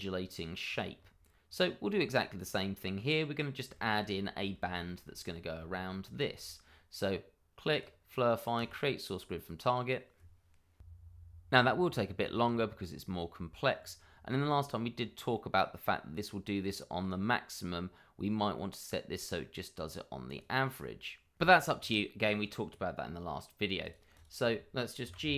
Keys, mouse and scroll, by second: 0.2 middle click, 0.6 click, 0.9-2.8 scroll up 1, 2.8-3.6 scroll down 1, 3.7 shift+middle click, 3.8 middle click, 4.8 shift+middle click, 5.0-5.8 scroll up 1, 5.9 middle click, 6.0 shift+middle click, 7.7 click, 11.6-12.2 scroll down 1, 12.2 middle click, 14.7-15.3 scroll up 1, 15.3 middle click, 18.5 middle click, 21.9 middle click, 22.7-23.8 scroll down 1, 23.8 click, 24.2 double click, 24.4 middle click, 25.0 g, 25.2 y.